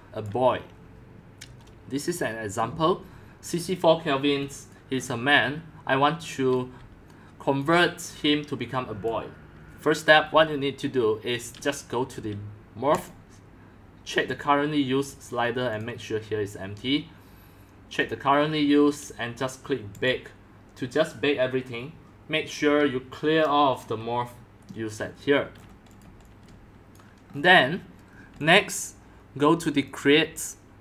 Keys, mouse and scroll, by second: 0.6-2.7 drag, 4.4 x, 4.8 click, 5.0-6.5 scroll down 10, 6.5-8.4 typing, 7.9 click, 10.8-12.7 drag, 13.0-15.6 drag, 18.9 drag, 19.9 click, 22.8 click, 24.0-25.1 drag, 25.5-26.0 scroll down 6, 26.0 click, 26.1 x, 26.5 c, 27.0 click, 27.1 c, 27.3 middle click, 27.4 middle click, 27.4-28.1 scroll down 7, 28.1-28.6 scroll up 2, 28.4 x, 28.6-29.0 drag, 29.8 click.